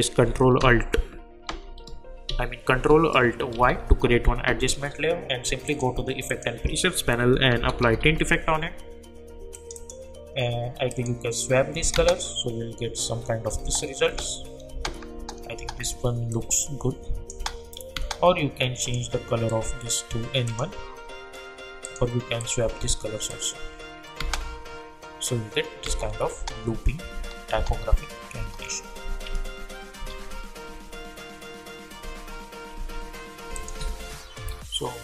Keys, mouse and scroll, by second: 1.4 ctrl+alt+shift+y, 2.2 ctrl+z, 3.6 ctrl+alt+y, 5.6 click, 7.0-8.5 typing, 9.5 click, 11.7 -, 11.9 space, 16.3 click, 17.3 space, 18.8 click, 24.2 space, 29.3 ctrl+z, 33.5 click.